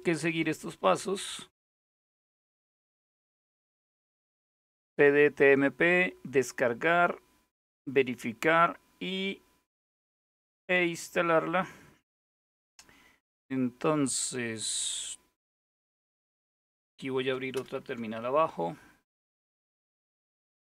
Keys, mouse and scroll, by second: 0.1 ctrl++, 0.3 ctrl++, 0.5 ctrl++, 1.1 ctrl++, 2.9-3.8 scroll down 1, 8.3-9.0 scroll down 1, 9.0-9.9 scroll up 1, 10.5-11.2 scroll down 1, 11.2-11.7 scroll down 1, 11.7-12.7 scroll up 1, 12.9-13.8 scroll down 1, 15.7 ctrl+super+Down, 17.2 super+Return, 19.0-19.9 scroll down 1, 20.3 click.